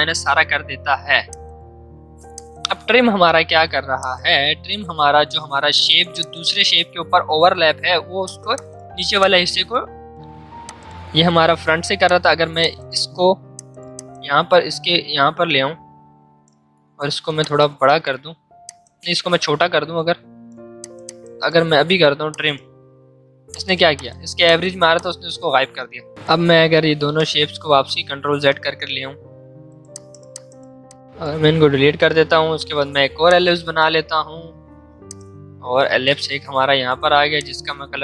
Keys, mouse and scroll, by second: 5.2 v, 5.6 click, 7.0 ctrl+z, 7.2 right click, 8.2 click, 8.2-18.6 drag, 18.6-20.8 drag, 25.6 ctrl+z, 26.1 click, 27.6 ctrl+z, 29.5 right click, 29.9 click, 32.5 l, 33.3 shift+click, 34.2 v, 35.0-37.4 alt+drag, 37.4-38.0 drag.